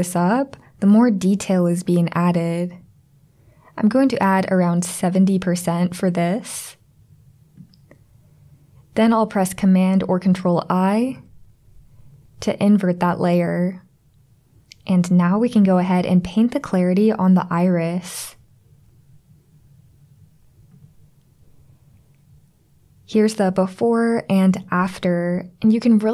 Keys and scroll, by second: 11.1 super+i, 15.5 [, 15.6 [, 15.8 [.